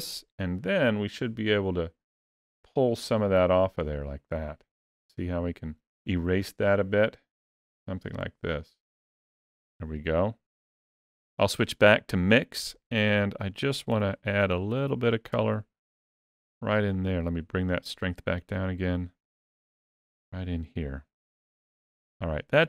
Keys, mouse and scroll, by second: 1.4 click, 2.1 click, 3.0 click, 3.7 click, 7.1 click, 9.0 click, 13.7 f, 16.8 click, 18.4 click, 19.0 click, 19.6 click, 20.8 click, 22.2 click.